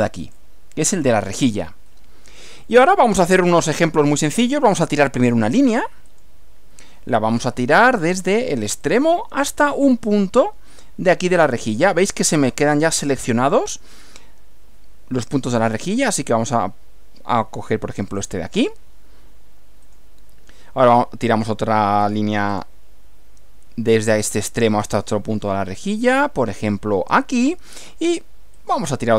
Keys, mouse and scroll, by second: 0.3 click, 2.7-4.0 middle drag, 6.1 click, 8.9 click, 18.1 click, 19.9 click, 22.5 click, 27.1 click, 28.6 click.